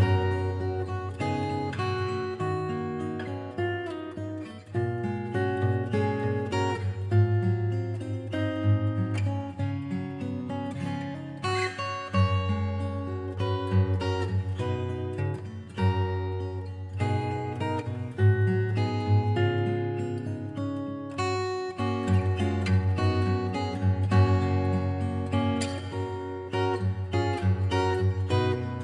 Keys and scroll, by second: 2.0-4.7 scroll down 1, 16.8 scroll up 1, 17.8 scroll down 1, 18.6-18.9 scroll up 1, 26.2 scroll down 1, 27.6 scroll up 1.